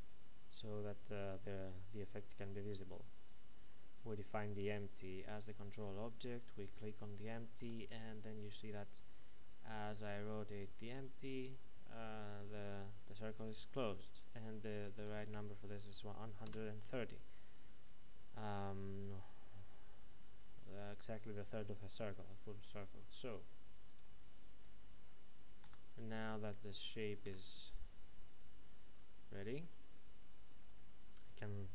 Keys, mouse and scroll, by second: 6.1 right click, 7.6 r, 16.5 KP_Enter, 23.9 right click, 25.6 Tab, 27.3 a.